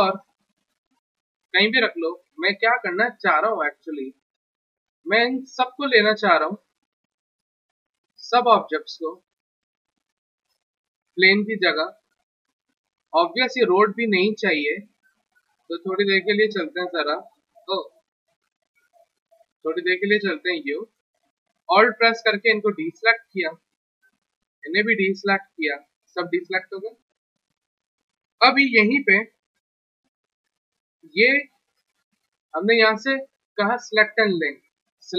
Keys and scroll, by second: 17.9 ctrl+z.